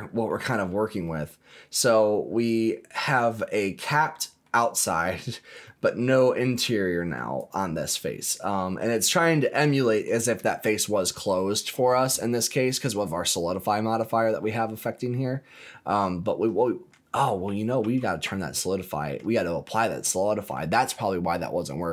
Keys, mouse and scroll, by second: 0.5 scroll up 2, 1.0-3.2 middle drag, 3.4 shift+middle click, 4.0 middle click, 4.6 scroll up 1, 5.4 scroll up 1, 5.6 middle click, 6.9 middle click, 7.3 click, 8.0 middle click, 9.0-9.4 scroll up 2, 9.4 middle click, 10.4 shift+middle click, 14.6 scroll down 2, 15.1 scroll up 2, 15.5-16.9 middle drag, 17.4 ctrl+z, 17.8 ctrl+z, 18.3 scroll down 2, 18.7 middle click, 19.1 scroll down 1, 19.4-20.5 middle drag.